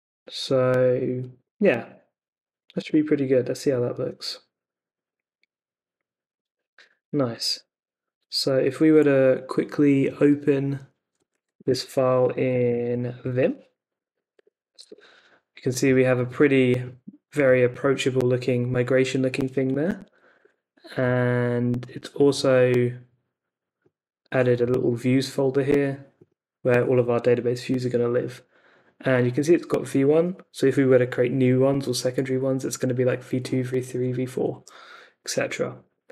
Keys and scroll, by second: 2.7 Return, 11.3 super+c, 11.6 super+Tab, 13.7-14.8 typing, 14.8 Return, 20.0 Escape, 20.0-20.9 typing, 34.5 t, 35.8 super+Tab.